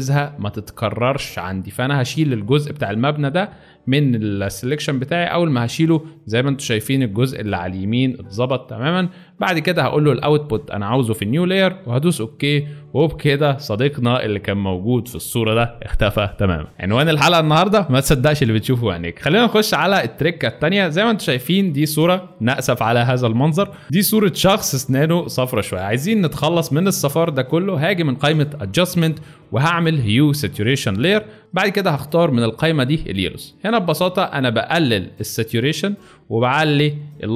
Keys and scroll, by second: 14.2 ctrl+alt+d, 21.4 alt+space.